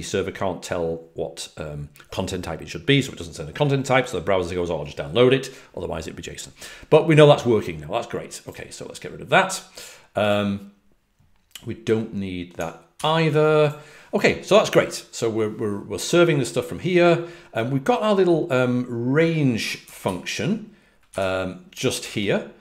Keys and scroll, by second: 12.9 super+w.